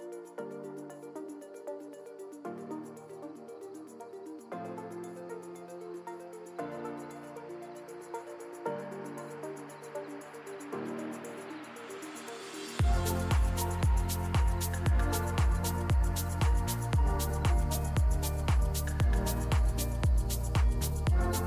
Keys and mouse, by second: 0.4-0.9 drag, 1.2-4.0 drag, 4.4 click, 5.4 ctrl+s, 6.8 KP_0, 8.2 shift+a, 10.8-11.8 drag, 12.2 KP_3, 13.1 g, 14.2 KP_0, 15.3 g, 17.0-20.0 drag, 17.7-19.3 typing, 21.2 click.